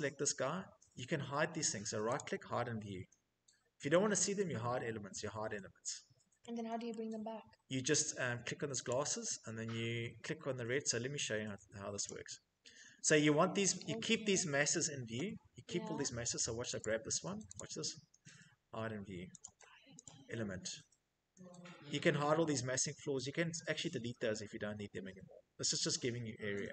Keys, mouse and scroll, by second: 1.6 right click, 4.0 Escape, 5.2 Escape, 6.4 middle click, 8.4 click, 11.6 click, 12.6 Escape, 16.3 click, 17.0 right click, 18.9 click, 19.5 click, 24.5 Escape, 26.4 click.